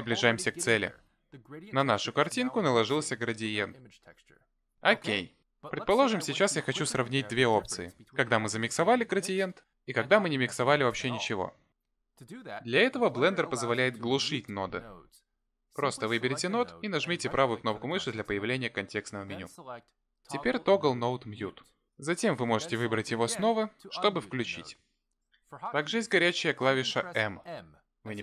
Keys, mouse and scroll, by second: 16.5 click, 17.5 right click, 23.0 right click.